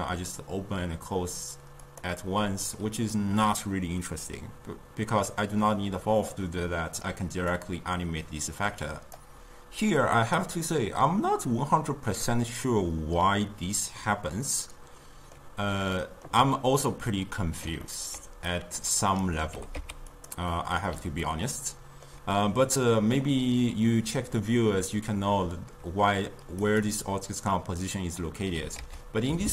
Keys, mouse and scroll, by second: 6.7 drag, 7.6-9.3 drag, 14.5-18.5 middle drag, 18.5-19.5 drag, 19.5 g, 20.5-25.4 middle drag, 26.6 click, 28.8 ctrl+a.